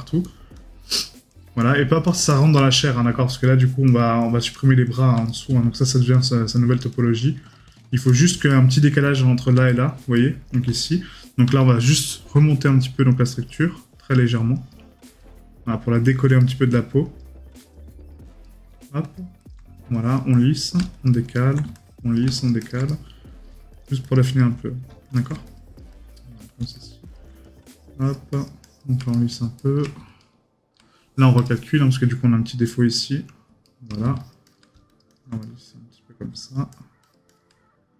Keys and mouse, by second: 2.7 right click, 5.3 right click, 8.5 right click, 16.4 right click, 18.4 right click, 22.9 right click, 29.1 right click, 33.6 right click, 35.4 right click.